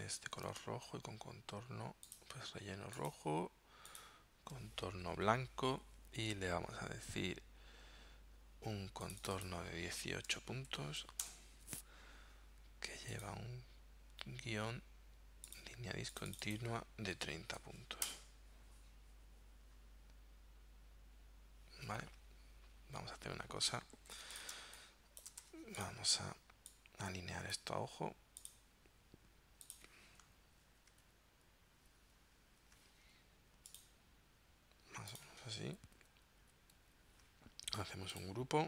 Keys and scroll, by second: 0.6 super+Tab, 10.3 1, 10.7 8, 11.2 Return, 17.2 3, 17.6 0, 18.1 Return, 24.0 z, 24.6 space, 25.5 v, 30.5 Down, 31.0 shift+Down, 31.6 shift+Down, 32.0 shift+Right, 33.0 shift+Down, 36.0 shift+Up, 36.4 shift+Left, 36.8 shift+Down.